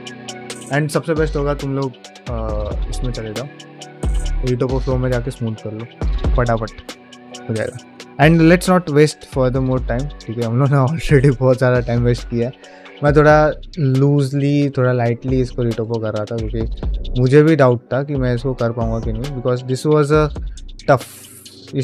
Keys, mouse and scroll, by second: 0.3 ctrl+middle click, 2.2 ctrl+Tab, 3.1 Tab, 4.1-21.8 drag.